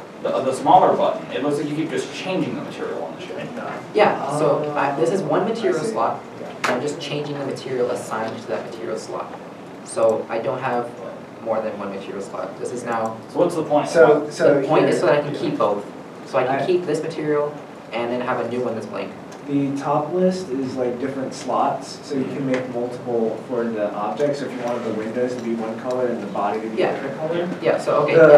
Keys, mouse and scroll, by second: 0.3 Tab, 2.6 Tab, 24.0 middle click, 24.8 alt+a, 25.2 shift+middle click, 27.7 middle click.